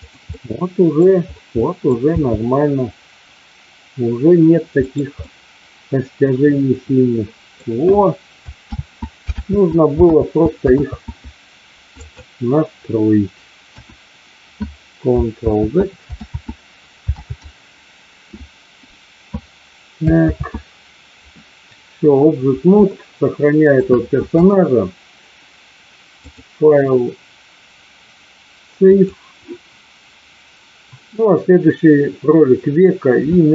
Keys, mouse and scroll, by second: 0.3-0.8 scroll up 2, 0.8 middle click, 1.5 middle click, 1.9-2.4 scroll down 2, 2.4 g, 4.8-5.1 scroll up 2, 4.8 middle click, 5.4-7.6 middle drag, 8.5 ctrl+z, 9.3 ctrl+z, 10.0 ctrl+z, 10.6 ctrl+z, 12.0 click, 13.6 KP_1, 15.5 ctrl+z, 16.3 ctrl+z, 17.3 ctrl+z, 20.4 ctrl+z, 22.9-23.8 shift+middle drag, 26.1-29.0 drag.